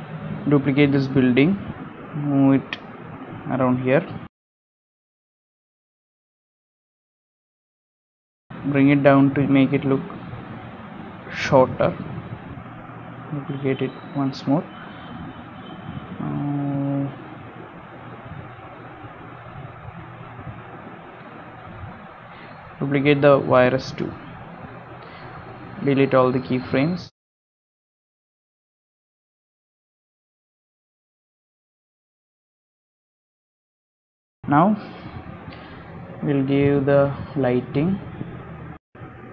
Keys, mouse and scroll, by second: 0.2 middle click, 0.5 scroll down 1, 1.3 shift+d, 4.5 KP_0, 5.3 scroll up 3, 5.6 scroll down 1, 6.0 shift+middle click, 6.3 middle click, 6.9 g, 8.8 scroll down 1, 9.2 shift+middle click, 9.4 g, 10.9 shift+middle click, 12.4 middle click, 13.5 shift+d, 14.8 scroll down 1, 15.3 scroll down 1, 15.9 KP_7, 16.6 g, 18.5 g, 20.0 middle click, 20.9 click, 23.6 middle click, 23.9 g, 25.5 click, 26.4 shift+middle click, 27.4-31.6 typing, 32.6 middle click, 32.8 shift+d, 33.2 middle click, 33.3 g, 33.8 s, 34.0 space, 38.7 shift+middle click, 39.1 g.